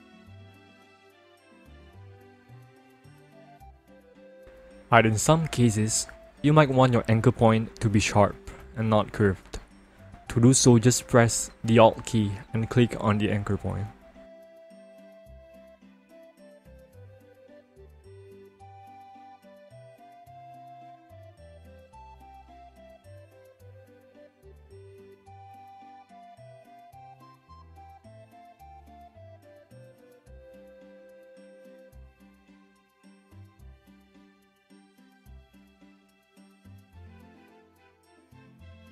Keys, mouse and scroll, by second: 0.9 click, 4.5 alt+click, 6.5 click, 7.9 ctrl+alt+z, 9.2 ctrl+alt+z, 11.1 alt+click, 12.8 click, 14.2 ctrl+alt+z, 14.7-15.6 scroll down 1, 16.5-17.9 alt+scroll up 1, 19.8 alt+click, 22.2 click, 23.3 ctrl+alt+z, 25.5 alt+click, 29.4 alt+click, 33.0 click, 35.4 alt+click, 36.6 click.